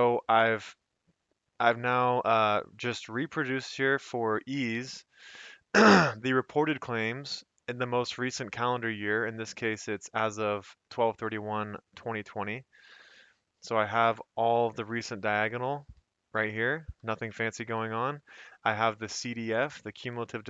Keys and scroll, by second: 0.7 F2, 1.9 Escape, 5.4 F2, 12.8 Escape, 14.1 F2, 14.8 Escape, 15.4 Down, 15.9 F2, 15.9 Escape, 16.2 Down, 16.7 F2, 16.7 Escape, 16.9 Down, 17.2 Escape, 17.4 Down, 17.8 F2, 17.8 Escape, 18.0 Up, 18.2 Up, 18.6 Up, 18.8 Up, 19.0 Right, 19.2 F2, 19.9 Escape, 20.1 Down.